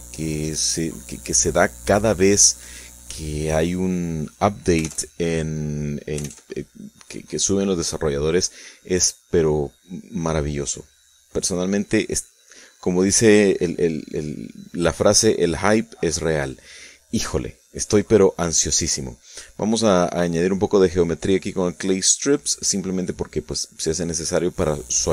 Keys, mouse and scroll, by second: 0.7-1.9 shift+drag, 4.3-5.3 drag, 5.6 shift+middle click, 6.2 shift+middle click, 7.1-15.3 shift+drag, 15.3-16.7 shift+middle drag, 16.7-18.4 shift+drag, 19.5-21.1 shift+drag, 21.4-23.4 drag, 23.7-25.1 shift+drag.